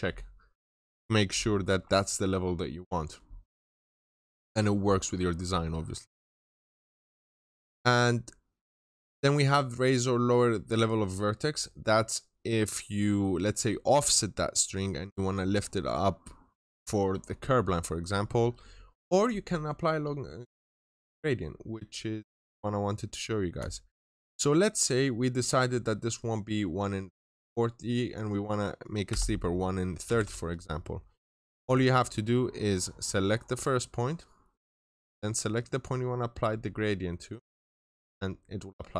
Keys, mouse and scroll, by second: 0.4 middle click, 2.2 scroll up 1, 2.6-3.9 scroll down 2, 2.8 middle click, 3.9-4.6 scroll up 1, 5.6-6.4 scroll down 2, 5.8 middle click, 6.4 right click, 9.1 click, 28.9-30.0 typing, 32.2-33.2 scroll up 1, 33.2 click, 34.4 middle click, 35.5 click, 36.3-37.2 scroll up 1, 37.2 click, 38.4 scroll down 1.